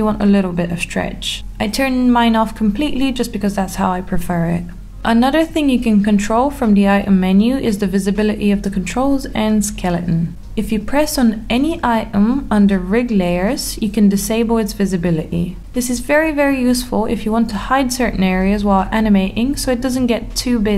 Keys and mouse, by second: 0.5 click, 0.7 ctrl+z, 1.0 click, 1.4 g, 1.8 click, 1.9 middle click, 2.1 g, 2.6 r, 3.0 middle click, 3.2 g, 3.6-4.7 middle drag, 4.8 middle click, 4.9 click, 5.1 middle click, 5.5 click, 5.8 click, 6.3 g, 7.5 click, 7.7 ctrl+z, 9.6 click, 10.5 click, 12.1 middle click, 14.2 click, 15.3-17.2 middle drag, 18.5 click, 19.3 click, 19.9 click.